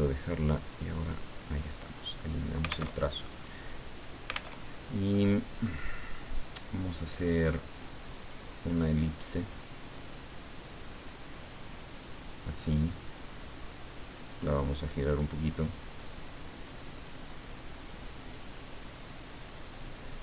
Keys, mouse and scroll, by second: 1.0 click, 3.0 alt+Tab, 4.5 alt+Tab, 5.1-6.1 middle drag, 8.2 click, 10.0-12.8 drag, 13.0 click, 14.3 click, 15.3-17.4 drag, 17.9-20.2 drag.